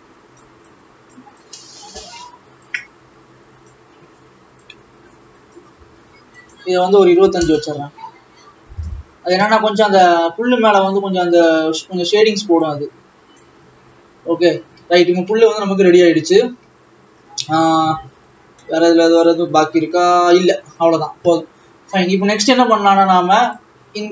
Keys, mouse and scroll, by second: 1.6-8.4 drag, 8.4-9.5 scroll up 6, 11.0-14.3 drag, 14.3 scroll down 6, 15.2 ctrl+s, 17.5 alt+a, 23.2 scroll down 1, 23.7 click.